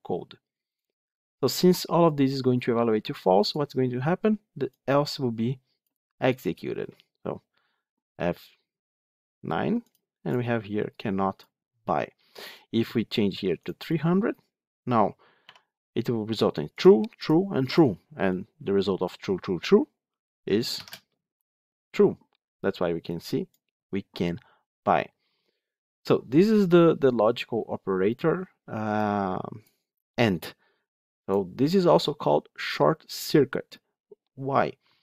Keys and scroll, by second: 8.1 F9, 20.6 ctrl+shift+F10.